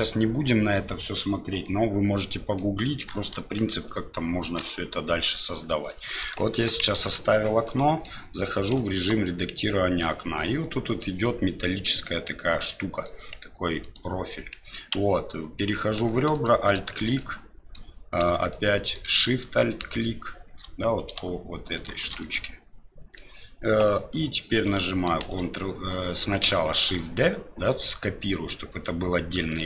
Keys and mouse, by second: 1.6-2.6 middle drag, 3.3 KP_7, 4.6 KP_Divide, 6.4 shift+middle drag, 6.9 Tab, 7.6 middle click, 8.7 shift+middle click, 9.6 middle click, 11.2 middle click, 12.7 middle click, 13.8 right click, 14.9 2, 16.3 alt+right click, 17.1 middle click, 18.5 middle click, 21.7 alt+shift+right click, 22.2-23.2 middle drag, 25.2 ctrl+e, 26.8 shift+d.